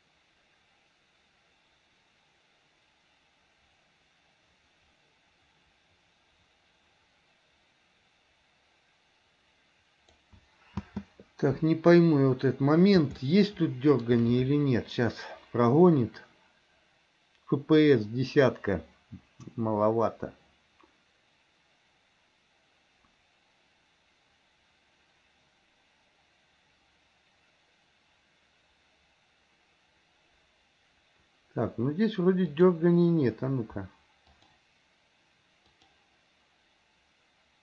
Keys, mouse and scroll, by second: 11.1 space, 12.2-13.2 middle drag, 13.4 middle click, 32.8 click, 34.5 click, 35.9 click.